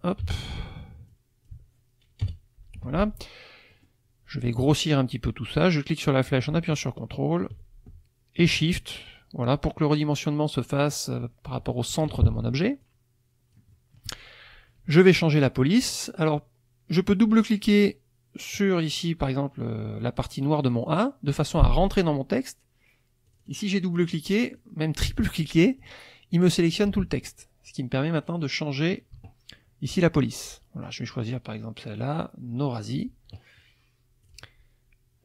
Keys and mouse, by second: 0.2 t, 1.1 click, 2.2 BackSpace, 2.8 F1, 3.7 middle click, 5.6-12.3 drag, 12.8-14.2 drag, 13.7 middle click, 20.6 click, 23.3 click, 23.9 click, 24.5 click, 25.1 click, 25.8 click, 28.1 click, 30.0 click, 34.3 click.